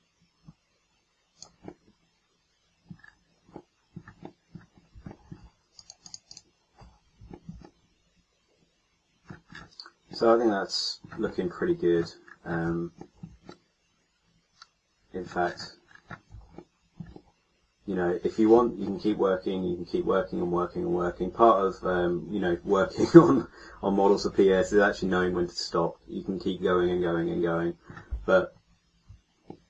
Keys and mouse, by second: 5.7-7.8 drag, 6.7 a, 8.7 middle click, 15.3 middle click, 20.8-29.4 middle drag.